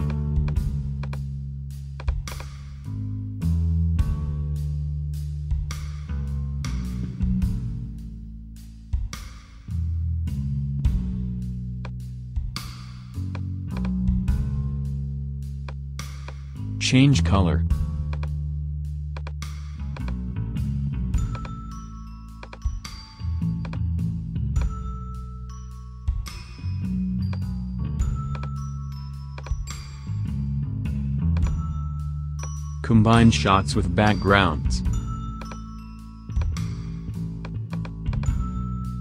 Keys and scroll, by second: 1.2 BackSpace.